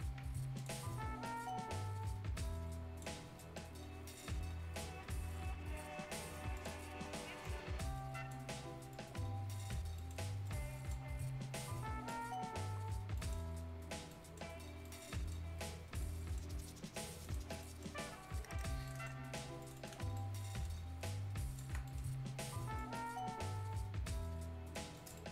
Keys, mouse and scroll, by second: 0.5-3.2 drag, 3.2 scroll down 1, 3.3 right click, 3.7 scroll up 1, 4.1 click, 4.9 scroll up 1, 6.5 click, 8.4 scroll up 1, 8.9-12.2 drag, 12.2-12.9 scroll down 1, 12.9 scroll up 1, 13.1 right click, 13.4-13.7 scroll down 1, 14.1 right click, 14.5 scroll up 1, 14.8 right click, 15.4-16.0 scroll down 1, 16.0 right click, 17.2 click, 17.6 right click, 17.9 scroll down 1, 18.3 scroll up 1, 18.3 right click, 18.8 right click, 18.8-19.3 scroll up 2, 18.8 right click, 19.6 click, 20.0 scroll down 1, 20.1 right click, 21.0 ctrl+click, 21.8 right click, 22.1-22.7 scroll up 1, 22.7-24.9 drag, 25.1 right click.